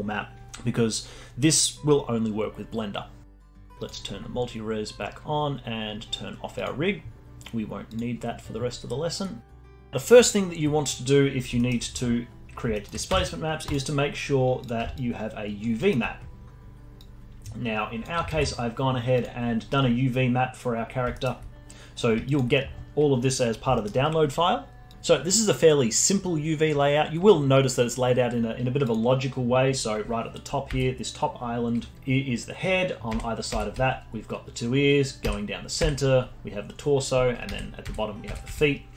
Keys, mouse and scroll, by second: 4.6 click, 7.9 click, 9.6 drag, 9.9-10.9 alt+drag, 10.9 scroll up 1, 11.3 scroll down 1, 11.5-13.1 alt+middle drag, 13.1 Tab, 14.9 alt+click, 15.8-17.0 alt+middle drag, 17.0-18.3 drag, 18.3 ctrl+alt+s, 19.9-21.1 scroll up 4, 21.1 alt+middle click, 21.7-22.2 scroll down 1, 22.2-23.4 alt+drag, 23.4 scroll up 1, 23.7-24.9 alt+middle drag, 28.8 click, 30.7 l, 31.5 3, 33.2 l, 33.6 l, 35.3 l, 35.9 l, 37.5 l, 37.9 l, 38.3 l, 38.5 l.